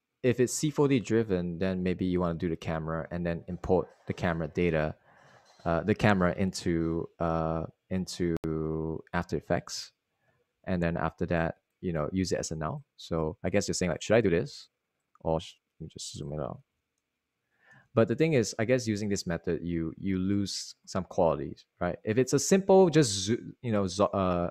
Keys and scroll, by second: 13.0 s, 20.0-21.7 typing, 21.4 Return.